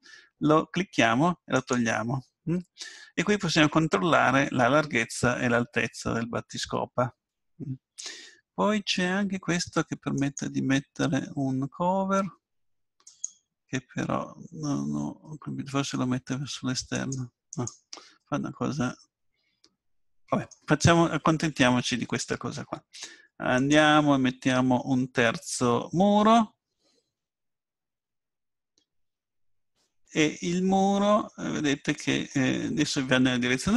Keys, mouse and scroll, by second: 1.6-12.1 drag, 13.1-14.9 drag, 14.9-17.0 middle drag, 17.0-19.4 drag, 19.4 middle click, 23.6-25.4 drag, 25.4-31.7 middle drag.